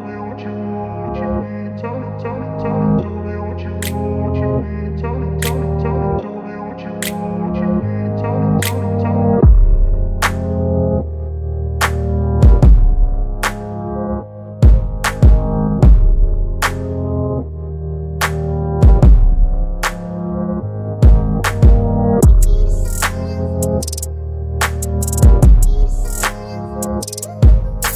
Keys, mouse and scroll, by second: 7.2 click, 7.2 click, 8.4 ctrl+t, 10.0-11.0 click, 14.5 ctrl+t, 16.3-17.0 drag, 24.2 click, 24.2 click, 26.6-27.9 drag.